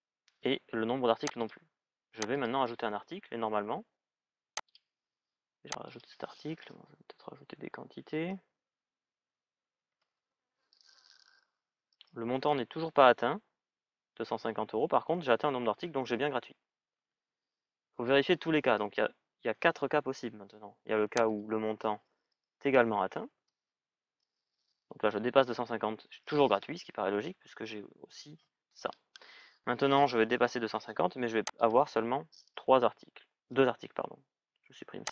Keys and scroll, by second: 7.9 Return, 9.1 shift+é, 9.6 Return, 22.9 shift+-, 23.1 Return, 33.2 Return, 33.3 Delete.